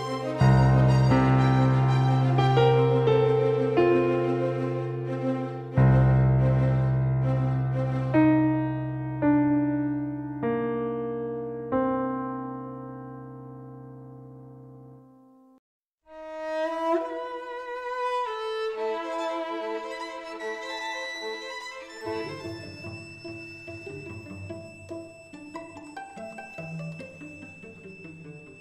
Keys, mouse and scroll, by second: 0.8-3.3 right drag, 4.1-6.2 drag, 7.2-9.3 drag, 11.5-13.8 drag, 15.5-18.7 drag, 16.5-19.2 right drag, 19.2 x, 21.2-23.1 middle drag, 28.2-28.6 middle drag.